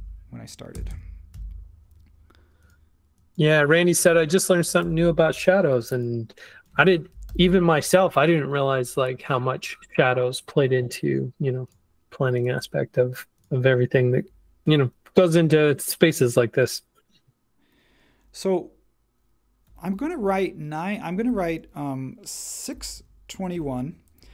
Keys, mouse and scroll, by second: 0.0-1.3 typing, 4.8 9, 5.0 Tab, 6.7-7.8 typing, 19.7 9, 20.2 m, 21.1 BackSpace, 21.3 BackSpace, 22.4-24.3 typing.